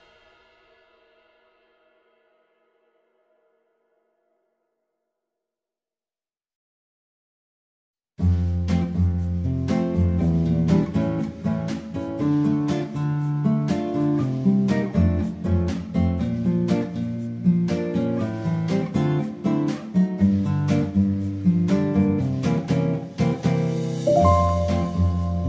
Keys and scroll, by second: 1.9-4.3 typing, 14.7 Tab, 16.0 ctrl+z, 19.3 ctrl+a, 20.7 F2, 23.1 Tab.